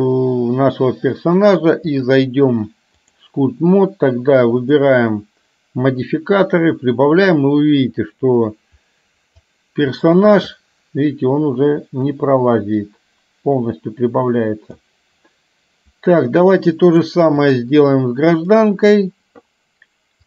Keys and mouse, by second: 2.0-3.2 drag, 4.7 click, 6.2-9.5 drag, 12.2-14.9 drag, 17.1 click, 18.4 click.